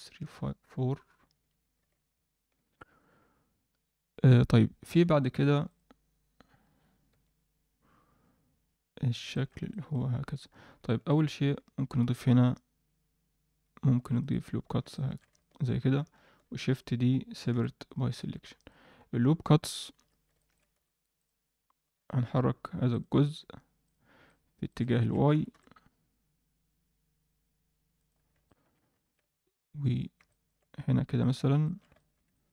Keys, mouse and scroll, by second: 1.7 alt+a, 2.3 middle click, 5.2 middle click, 5.6 click, 6.6 KP_7, 7.1 Tab, 9.3 shift+middle click, 9.7 ctrl+middle click, 10.8 shift+middle click, 12.0 ctrl+r, 14.6 scroll down 1, 14.9 shift+middle click, 15.3 ctrl+middle click, 16.4 shift+d, 17.5 p, 18.2 Tab, 18.5 click, 19.0 Tab, 19.2-20.0 scroll up 1, 20.0 a, 20.3 alt+shift+middle click, 20.7 z, 21.1 click, 21.8 z, 22.9 click, 23.2-24.1 drag, 24.2 middle click, 24.6 alt+shift+middle click, 25.0 ctrl+alt+middle click, 25.3 g, 28.1-28.7 scroll down 2, 28.4 shift+middle click, 28.9 ctrl+middle click, 29.4 alt+middle click, 30.2 ctrl+alt+middle click, 31.2 click, 31.6 ctrl+middle click, 31.9 alt+shift+middle click, 32.3 ctrl+middle click.